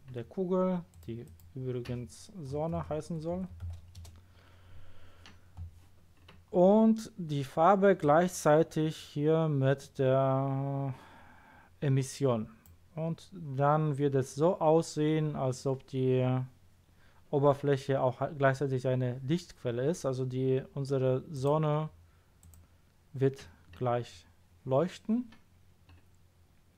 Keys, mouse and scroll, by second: 0.9 click, 1.2 click, 2.7 shift+s, 3.3 n, 3.6 e, 4.0 Return, 8.0 click, 21.3 click, 22.4 click.